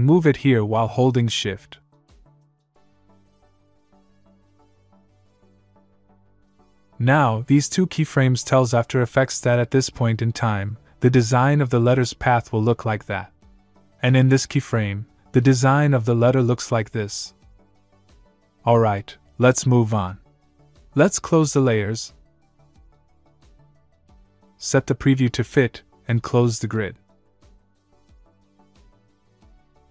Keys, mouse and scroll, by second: 0.7 click, 2.4 click, 8.2 click, 13.5 click, 15.0 click, 17.7 click, 22.3 click, 23.7 click, 25.3 click, 29.2 '.